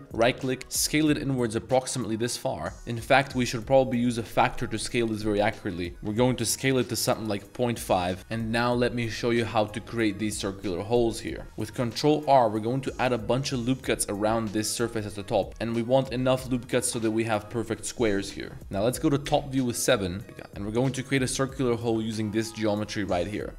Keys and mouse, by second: 0.6 ctrl+z, 2.4 s, 5.9 ctrl+z, 6.1 s, 7.1 ., 7.2 5, 7.6 Return, 8.6 middle click, 11.7 ctrl+r, 16.5-18.1 drag, 18.1 middle click, 19.3 KP_7, 21.0 ctrl+shift+click.